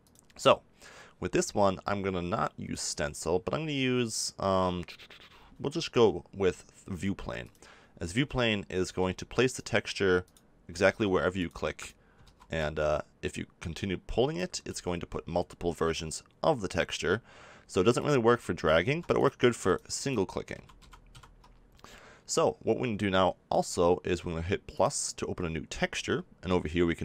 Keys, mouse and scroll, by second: 8.8 f, 10.8 ctrl+z, 12.2 ctrl+z, 14.6 ctrl+z, 17.9 click, 18.8 ctrl+z, 20.5 ctrl+z, 20.7 ctrl+z, 21.1 ctrl+z, 24.7-27.0 drag.